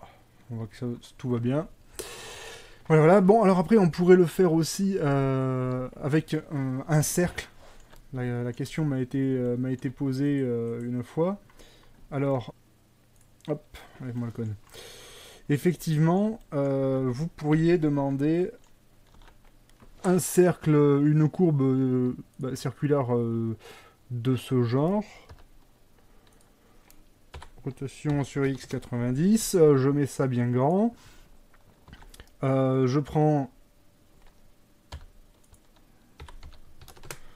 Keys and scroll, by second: 0.7 Escape, 17.6 shift+KP_1, 19.2 a, 25.4 g, 27.4-29.4 typing, 28.7 KP_Enter, 32.0 a, 35.0 g, 36.7 r, 36.7 x, 36.9 KP_9, 37.0 KP_0, 37.1 KP_Enter.